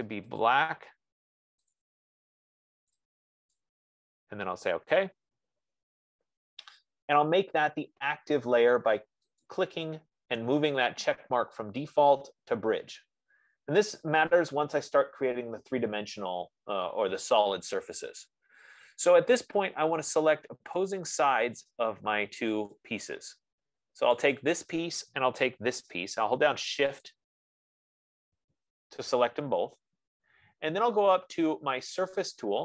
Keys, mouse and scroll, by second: 0.3-1.1 typing, 0.8 click, 2.1 click, 5.1 click, 9.8 click, 11.5-15.0 drag, 20.9 F15, 21.3 click, 23.1 click, 24.5 click, 27.5 shift+click.